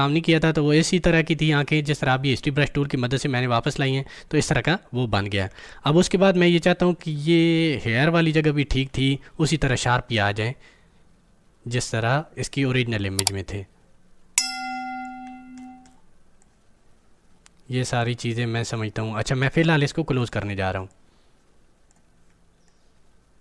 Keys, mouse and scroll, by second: 5.5-5.9 scroll up 1, 8.3-9.7 alt+right drag, 10.0-15.0 drag, 15.2-16.3 scroll down 4, 15.8 middle click, 16.3-23.4 drag.